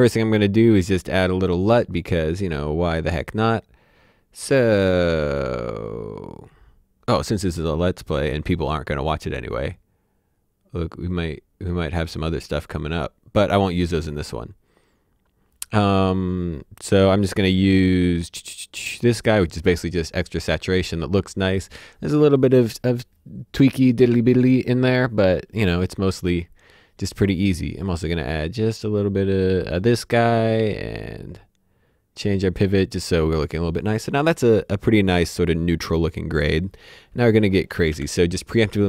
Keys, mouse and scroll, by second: 0.2 right click, 3.2 click, 18.9 click, 28.7 click, 31.0 click, 37.6 alt+Num_Lock, 37.9 alt+s.